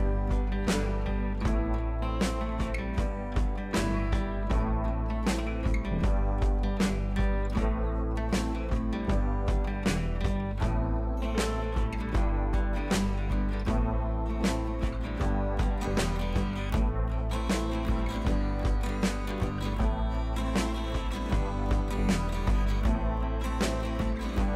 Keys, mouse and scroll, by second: 16.8 b, 17.8 click, 18.6 [, 19.5-22.0 drag.